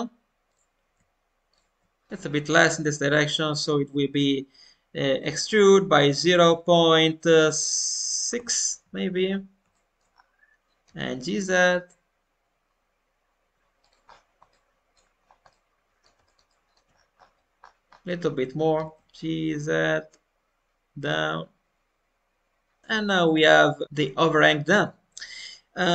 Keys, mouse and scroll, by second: 0.4-2.1 drag, 2.1 shift+middle click, 2.1-4.3 scroll up 2, 9.2-9.5 scroll up 1, 9.7 shift+middle click, 10.0-10.8 scroll up 2, 10.8 g, 14.0-14.4 scroll down 1, 14.4 middle click, 15.0-15.4 scroll down 2, 15.4 middle click, 16.2 alt+middle click, 16.9 scroll up 2, 18.5 scroll up 4, 18.7 g, 22.8-24.0 shift+middle drag, 22.8 scroll up 1.